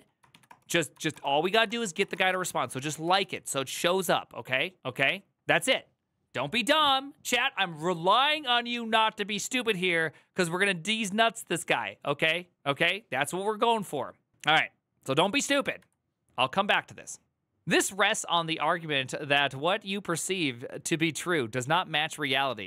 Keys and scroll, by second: 0.0 ctrl+v, 0.2 Return, 0.8 ctrl+v, 0.9 Return, 1.3 ctrl+v, 1.4 Return, 1.9 ctrl+v, 2.0 Return, 2.9 alt+[, 14.3 alt+[, 14.9 alt+{, 15.0 alt+[.